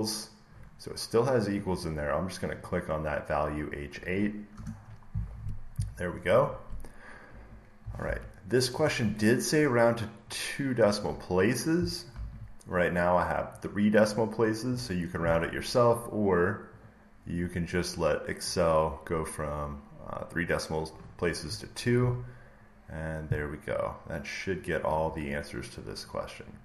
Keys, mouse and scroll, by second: 2.5 click, 4.4 Return, 6.1-9.7 drag, 7.9 alt+Tab, 10.9 click, 12.0 alt+Tab, 13.5 click, 16.8 click, 18.5 click, 20.4 click, 24.4 click.